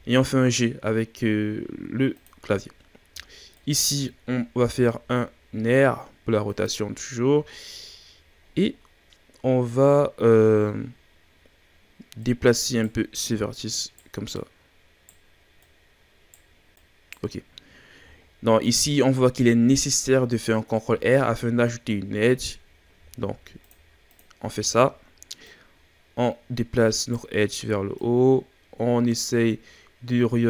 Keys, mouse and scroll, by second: 3.5 alt+right click, 4.6 r, 7.5-11.1 middle drag, 7.5-8.1 scroll down 3, 8.1-10.1 scroll up 1, 10.1-11.1 scroll up 1, 12.1 right click, 13.2 right click, 14.3 right click, 15.5 right click, 16.7 right click, 18.2 middle click, 18.2-20.7 scroll up 2, 20.7-21.3 shift+scroll up 1, 22.9 ctrl+r, 24.5-25.5 shift+scroll up 2, 25.5 right click, 28.0 right click.